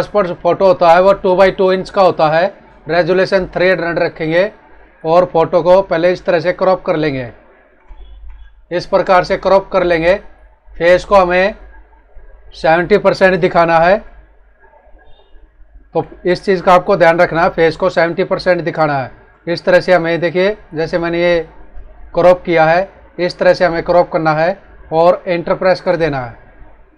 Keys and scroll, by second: 7.9 ctrl+=, 8.6 Left, 11.8 Right, 17.9 Up, 19.2 Right, 19.9 Down, 22.8 Right, 23.8 Left.